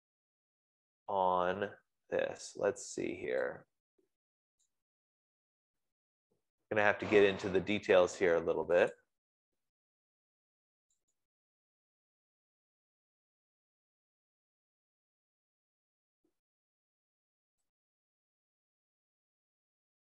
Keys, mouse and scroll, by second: 2.0-2.7 scroll, 2.7-3.7 scroll, 5.0 click, 9.4 click, 11.5 click, 13.2-14.3 scroll, 14.8 scroll, 15.4-19.4 scroll, 19.6-20.0 scroll.